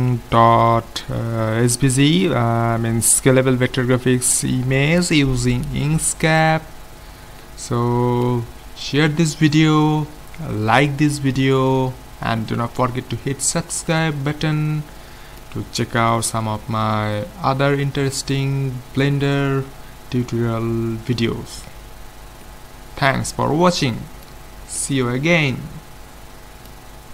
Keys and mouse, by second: 6.9-11.4 middle drag, 13.9-16.7 middle drag, 22.5-24.4 middle drag, 24.9-26.4 middle drag.